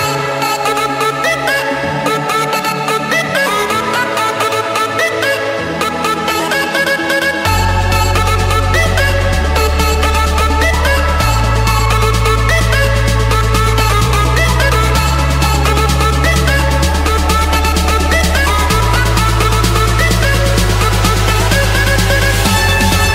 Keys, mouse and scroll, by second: 0.1 click, 1.8-2.9 drag, 3.0-4.1 drag, 8.0 2, 10.4-11.1 typing, 12.8 Return, 13.8 Escape, 16.1 click, 17.4-18.2 scroll, 18.6 click, 19.1 click, 19.8-20.6 scroll down 12, 21.1-21.5 scroll down 4, 21.5-22.2 scroll up 2, 22.8-23.1 drag.